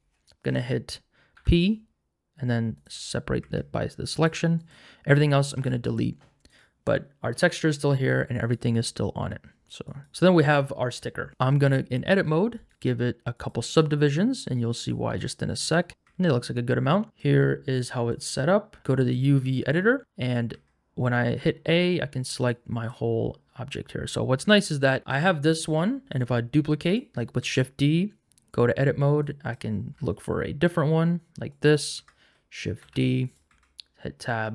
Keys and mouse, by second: 1.3 p, 3.4 Tab, 5.6 x, 6.5 click, 8.5-10.0 right drag, 10.1 Tab, 10.1 ctrl+z, 11.3 Tab, 12.2 a, 12.6 right click, 13.7 right click, 14.4 right click, 15.3 right click, 16.0 Tab, 18.2-19.2 drag, 20.3 click, 20.5 Tab, 22.5 click, 25.1 Tab, 26.1 shift+d, 26.8 click, 27.4 Tab, 29.9 g, 31.5 click, 32.0 Tab, 32.8 shift+d, 33.2 click, 33.5 Tab, 34.2 shift+middle click.